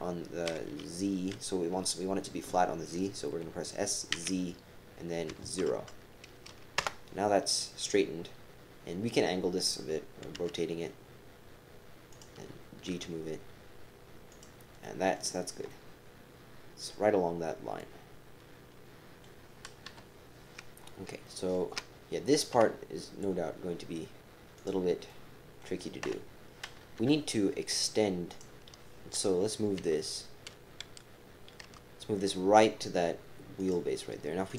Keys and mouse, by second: 11.0 r, 12.9 g, 14.8 click, 15.8-19.2 drag, 19.8 KP_3, 21.4 shift+KP_3, 22.5 KP_3, 22.6 KP_7, 24.6 click, 25.1 click, 26.0 KP_7, 27.0 KP_3, 28.3 click, 29.8 g.